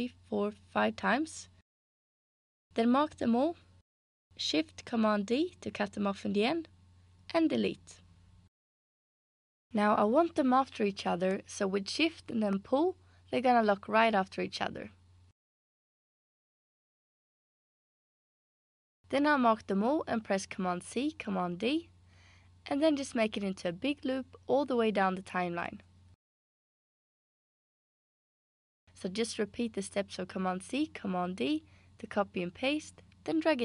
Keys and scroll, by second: 5.2 shift+super+d, 6.7 BackSpace, 20.6 super+c, 21.6 super+d, 30.4 super+c, 30.8 super+d.